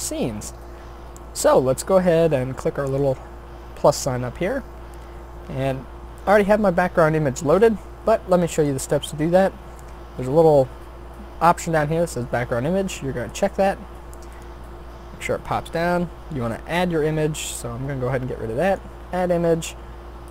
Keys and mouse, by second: 4.7-7.6 middle drag, 10.4-13.3 middle drag, 16.3-17.4 drag.